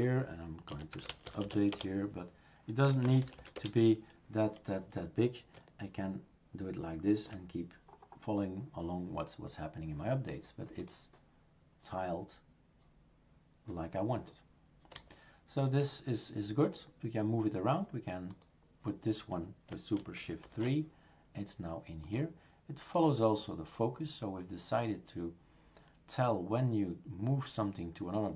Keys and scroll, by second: 0.7 typing, 2.6-3.5 typing, 20.4 shift+super+3.